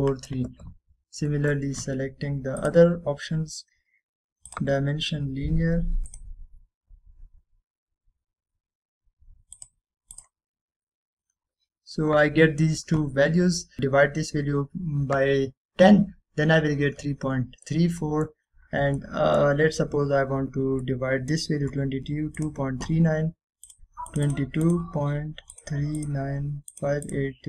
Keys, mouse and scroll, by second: 0.2-0.8 scroll down 1, 0.8-1.7 middle click, 2.0-2.4 scroll down 1, 2.4 middle click, 3.7 click, 10.7 click, 12.0-13.0 scroll up 1, 13.0-13.7 scroll down 1, 13.7 scroll up 1, 18.3-18.8 scroll down 1, 19.1 middle drag, 19.6-20.1 scroll down 1, 20.8-21.9 scroll up 1, 23.5 click.